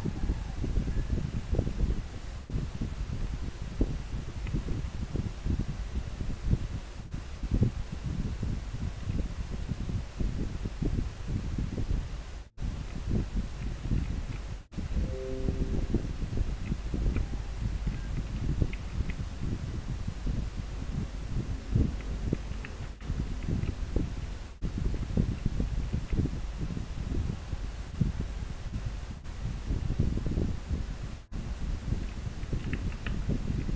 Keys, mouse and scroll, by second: 4.6 scroll down 1, 9.2 scroll up 1, 12.9 scroll down 1, 16.9 scroll up 1, 22.1 scroll down 1, 24.6 scroll up 1, 32.2 scroll down 1.